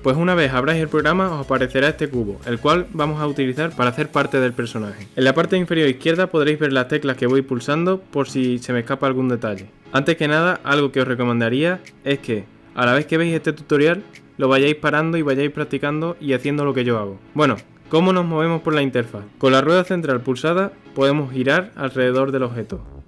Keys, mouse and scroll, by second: 2.7-3.9 scroll up 1, 3.9 click, 21.1-23.0 middle drag.